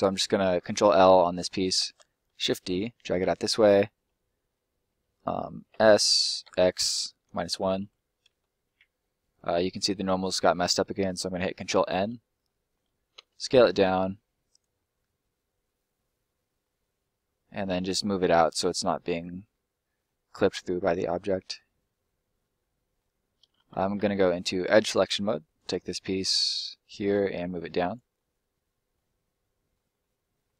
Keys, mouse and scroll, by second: 0.1 middle click, 0.4-1.0 scroll up 1, 1.0 shift+scroll up 1, 1.1 shift+middle click, 1.8 shift+d, 2.3 middle click, 3.3 click, 5.7 s, 6.4 x, 7.2 -, 7.8 1, 8.2 Return, 9.0 middle click, 9.5-9.8 scroll up 1, 9.8 middle click, 11.0 ctrl+middle click, 12.4 middle click, 13.1 s, 14.4 click, 14.7 middle click, 17.5 middle click, 21.1 click, 21.6 middle click, 23.2 scroll up 1, 23.4 middle click, 23.6 ctrl+middle click, 24.5 click, 25.4 right click, 26.5 middle click, 27.4 click, 28.1 middle click, 29.1-29.9 scroll down 1, 30.0 middle click.